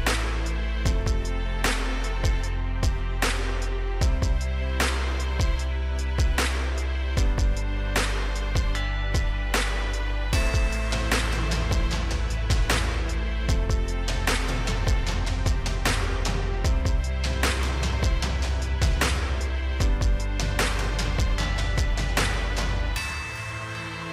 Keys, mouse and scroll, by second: 0.4 click, 1.5 right click, 2.7 click, 8.4 click, 16.0 right click, 16.5 click, 18.5 ctrl+click, 22.8 ctrl+click.